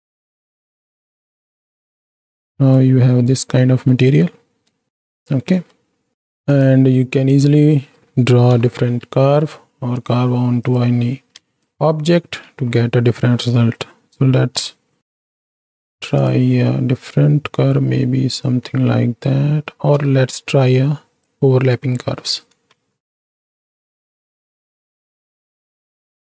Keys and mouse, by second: 0.0 click, 0.4 ctrl+space, 1.1-1.7 drag, 2.1-2.8 middle drag, 3.2-3.9 middle drag, 4.9 ctrl+space, 5.6 click, 6.5 click, 7.4 click, 8.5 KP_7, 10.6 click, 11.5 ctrl+space, 12.7 Tab, 15.2 t, 16.1 click, 18.4-19.4 drag, 19.9 ctrl+z, 20.5 click, 22.1 Tab, 23.0 shift+Right, 23.1 shift+Left, 23.5 space, 24.0-24.6 drag, 25.0 alt+a.